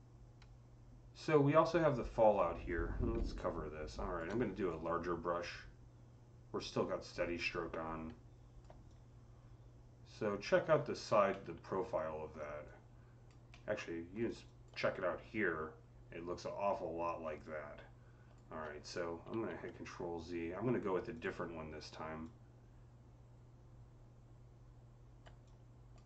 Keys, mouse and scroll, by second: 3.0 click, 3.0-4.2 typing, 3.3 click, 4.5-10.6 drag, 10.6-10.9 scroll up 5, 11.2-13.3 middle drag, 12.5 alt+click, 12.5-14.3 alt+drag, 13.3-16.9 alt+middle drag, 14.1 alt+scroll up 1, 17.1 alt+click, 17.1 alt+middle click, 17.1 alt+scroll up 1, 17.3-21.0 alt+drag, 19.1 z, 21.0-22.1 drag, 22.1-26.0 drag.